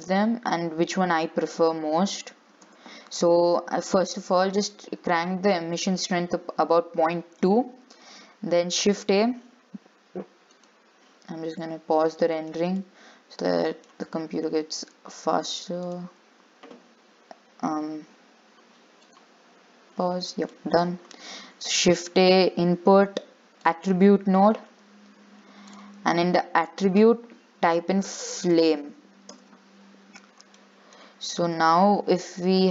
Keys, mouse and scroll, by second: 2.0-4.1 scroll up 1, 4.1 click, 9.5-12.0 shift+middle drag, 12.0 shift+a, 14.4-16.9 middle drag, 16.9 click, 19.8 click.